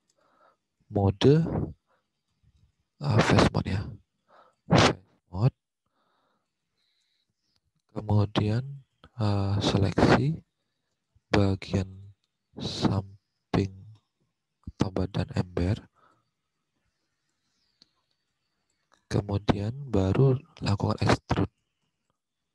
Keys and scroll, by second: 0.0-0.4 typing, 1.6-2.8 typing, 3.4 ctrl+shift+Left, 3.9-5.0 typing, 5.6 End, 6.3-7.9 typing, 10.1-13.8 typing, 15.5-16.9 typing, 18.0-19.1 typing, 20.9-22.5 typing.